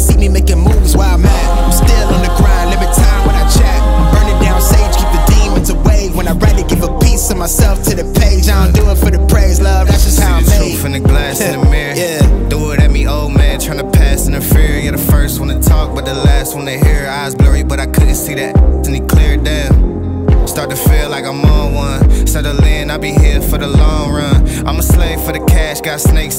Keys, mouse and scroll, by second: 6.0 click, 8.8 click, 13.4 click, 16.9 click.